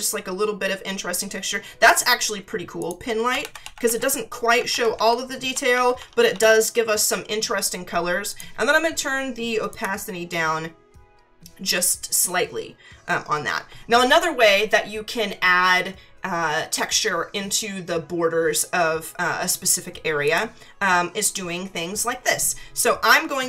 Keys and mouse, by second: 2.8 click, 3.4 ctrl+=, 4.7 ctrl+=, 5.5 ctrl+-, 8.3 click, 9.7 click, 20.2 click.